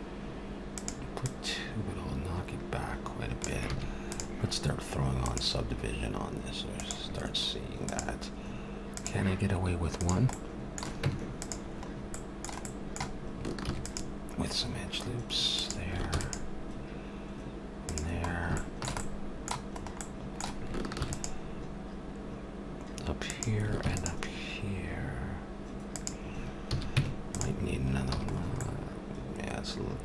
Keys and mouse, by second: 0.7-2.9 drag, 3.7 a, 4.1-7.1 drag, 7.9-10.3 drag, 10.3 middle click, 10.6 click, 11.0 Tab, 11.9-13.6 middle drag, 13.6 ctrl+r, 16.1 ctrl+r, 18.2-21.0 middle drag, 21.0 ctrl+r, 23.8 ctrl+r, 26.7 a, 26.9 Tab, 28.1 a, 28.3 middle click.